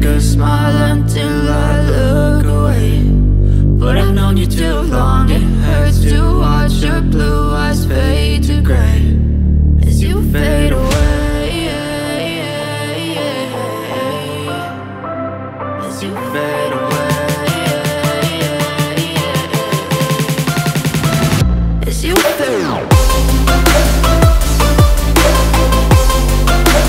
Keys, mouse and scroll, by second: 6.3-8.2 drag, 8.8-11.9 drag, 12.0-15.0 drag, 16.6-19.7 drag, 21.0-24.0 drag.